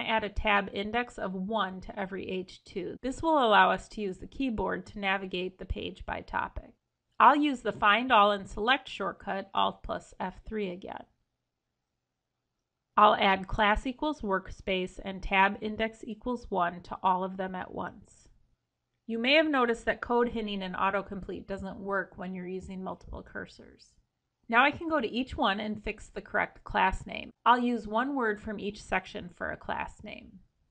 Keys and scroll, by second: 7.2 alt+F3.